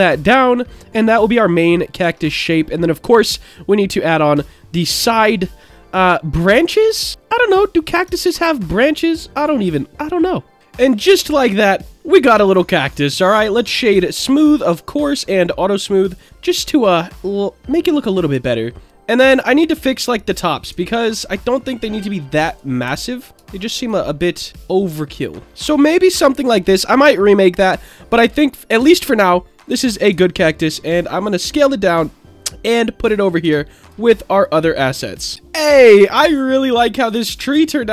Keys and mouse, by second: 0.1 click, 0.5-1.9 middle drag, 2.0 Tab, 5.1-7.9 middle drag, 8.0 Tab, 9.4-10.6 middle drag, 10.6 ctrl+j, 10.9-12.0 middle drag, 12.5-13.5 right drag, 13.8 click, 14.3 right click, 15.7 click, 16.4-18.0 middle drag, 18.3 Tab, 19.3 middle click, 19.9 click, 21.5-22.6 drag, 23.1 alt+click, 23.8 alt+shift+click, 24.5 click, 25.4 Tab, 25.4 middle click, 27.0-27.7 middle drag, 29.1 click, 30.1 s, 30.6 click, 31.2-33.0 drag, 33.4 s, 33.8 click, 34.6 click, 36.1-36.7 middle drag, 37.3-37.6 shift+middle drag.